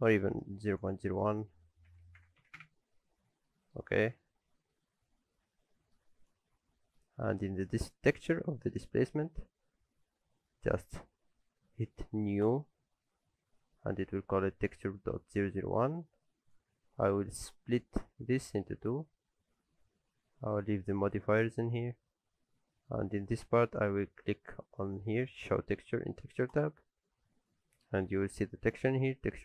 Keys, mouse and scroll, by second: 0.7 click, 3.5 middle click, 3.8 alt+a, 4.2 shift+middle click, 4.9 scroll up 1, 5.5 scroll down 1, 5.7 middle click, 6.2 click, 6.7 middle click, 7.1 scroll down 1, 7.3 shift+middle click, 12.4 click, 20.7 click, 26.5 click.